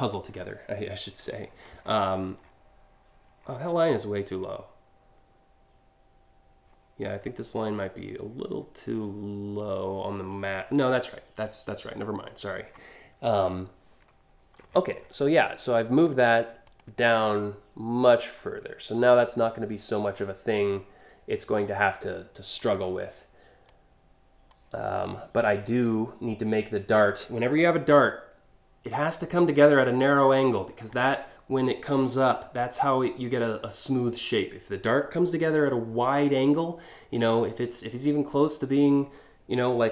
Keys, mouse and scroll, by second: 0.9 scroll down 2, 1.1-2.1 scroll up 6, 3.0 alt+scroll down 5, 14.3-14.8 alt+scroll up 2, 16.2 ctrl+click, 16.9-18.0 ctrl+drag, 19.1-22.2 ctrl+drag, 23.3 ctrl+click, 25.3-26.5 ctrl+drag.